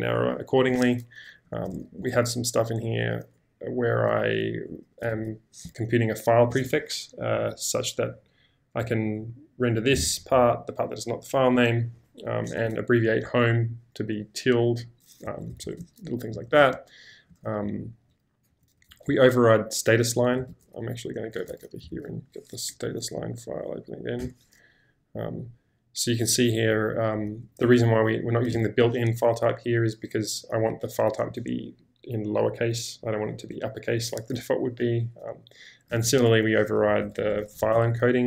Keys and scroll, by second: 1.3-2.2 typing, 3.4 typing, 5.1 shift+v, 15.2 Escape, 15.5 Escape, 15.6 Escape, 15.8-17.6 typing, 20.2-22.7 typing, 20.5 ctrl+k, 24.3 Return, 27.1-28.5 typing, 35.9 j, 36.9 Escape, 37.0 typing, 37.7 ctrl+h.